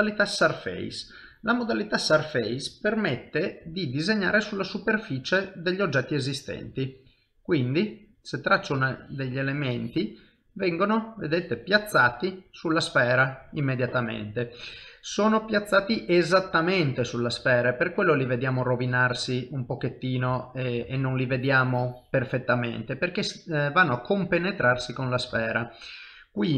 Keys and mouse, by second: 2.8 click, 3.6 middle click, 6.6 click, 7.7 middle click, 9.0 click, 10.3 middle click, 11.3 click, 12.2 middle click, 13.3 i, 15.2 ctrl+middle click, 15.8 shift+middle click, 16.8 ctrl+middle click, 17.6 shift+middle click, 18.1 ctrl+middle click, 20.3 ctrl+z, 20.8 ctrl+z, 21.4 click, 23.2 middle click, 24.8 ctrl+z, 25.4 ctrl+z, 25.7 middle click.